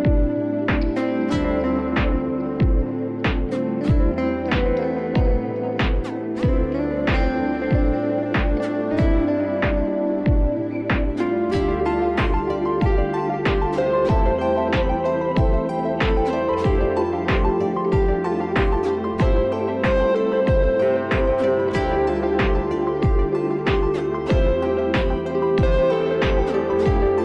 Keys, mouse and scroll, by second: 0.0 click, 0.5 click, 3.2 click, 5.5 click, 6.5 click, 8.8 click, 10.0 click, 12.1 click, 13.0 click, 15.6 click, 16.5 click, 17.5 click, 19.6 click, 19.9 click, 20.0-20.4 scroll down 3, 20.8 scroll down 2, 21.4 click, 22.5 click, 23.2 click, 24.1 click, 24.5-25.6 scroll down 3, 25.6-26.6 scroll down 1, 26.6-27.2 scroll.